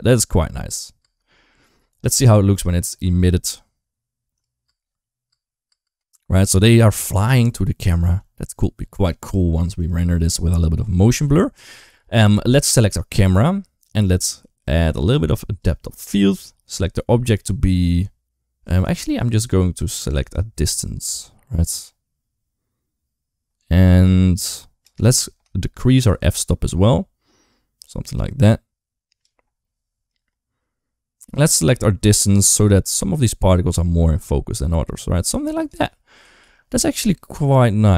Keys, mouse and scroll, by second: 0.8 space, 4.5 space, 5.1 space, 5.5 space, 5.6 space, 7.9 ctrl+s, 9.6 click, 10.3 click, 11.1 ctrl+s, 14.0 click, 15.4 click, 16.5 click, 20.5-24.7 shift+drag, 25.7-29.1 shift+drag, 30.0-35.5 shift+drag, 36.3 ctrl+s.